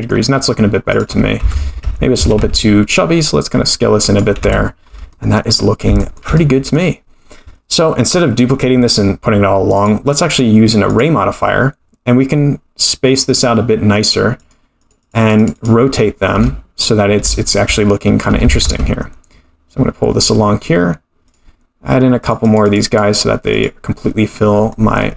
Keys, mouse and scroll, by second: 0.3-0.9 scroll up 2, 0.9 click, 0.9 scroll up 1, 1.4 Tab, 1.8 a, 2.1 s, 4.4 Tab, 4.6-5.1 scroll down 3, 5.1-5.4 middle drag, 5.5-6.0 scroll down 2, 6.0 shift+middle drag, 6.3-6.7 middle drag, 7.8-8.5 scroll down 3, 9.7 click, 10.3-11.1 drag, 12.8 click, 14.4 click, 14.8 click, 15.0 click, 15.2 click, 15.4 click, 15.5 click, 16.2-16.8 scroll down 1, 16.8-17.2 scroll up 3, 17.3 shift+middle drag, 18.4 g, 22.2 click, 22.4 click, 22.6 click, 22.8 click, 23.5 click, 24.7 middle click.